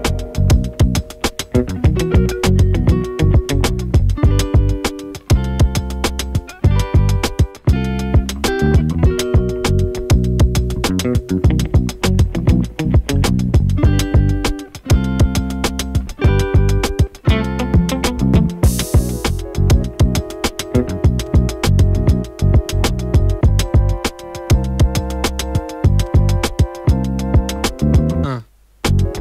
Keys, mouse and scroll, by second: 0.9-3.6 drag, 12.5 F5, 12.9 F4, 13.8 click, 17.8 shift+click, 18.9 ctrl+d, 20.5 click, 23.1-25.6 shift+drag, 25.9 space.